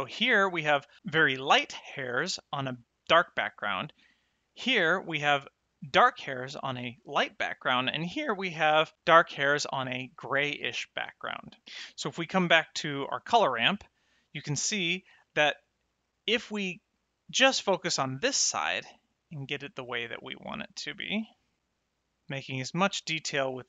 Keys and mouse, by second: 4.4 middle click, 7.8 middle click, 13.3 ctrl+shift+click, 14.7 middle click, 16.0 middle click, 19.5 click.